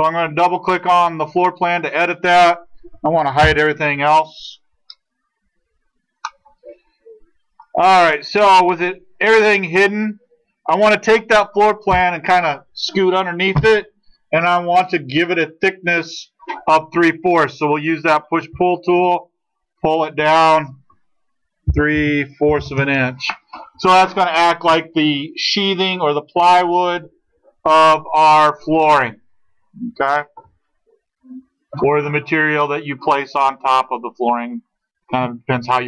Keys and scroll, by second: 3.4 ctrl+h, 18.4 p, 21.7-22.5 typing, 22.7 Return.